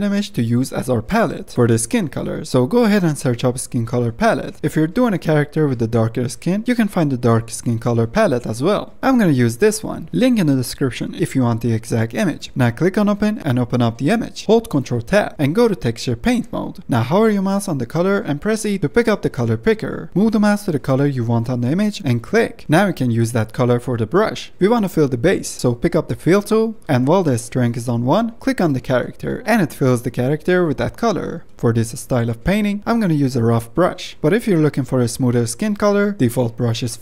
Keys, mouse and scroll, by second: 14.4 click, 26.2-28.9 drag, 28.9-29.4 scroll down 2, 29.4-30.2 scroll up 2, 30.2 shift+middle click, 30.7-31.2 scroll up 1, 31.2-32.8 shift+middle drag.